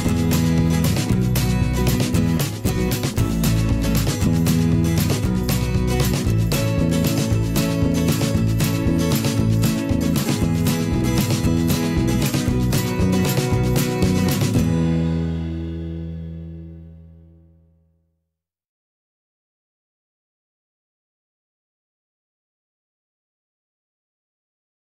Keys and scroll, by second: 0.4 ctrl+[, 1.2 ctrl+shift+[, 1.3 ctrl+], 3.9 ctrl+], 4.4 shift+Up, 6.1 ctrl+[, 6.4 ctrl+], 9.3 ctrl+shift+[, 9.7 ctrl+], 11.4 ctrl+[, 16.0 ctrl+shift+[, 16.1 ctrl+], 16.7 ctrl+], 17.5 ctrl+shift+[, 17.7 ctrl+], 19.1 ctrl+shift+[, 19.3 ctrl+], 19.8 ctrl+[, 20.1 ctrl+], 20.5 ctrl+[, 20.6 ctrl+], 22.0 ctrl+], 23.3 ctrl+shift+[, 23.8 ctrl+], 24.3 ctrl+[.